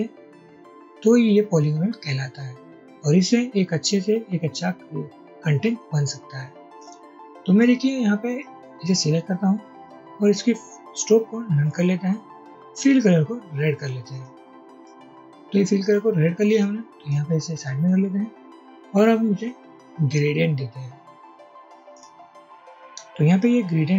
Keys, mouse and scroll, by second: 15.0 double click, 17.2-17.7 drag.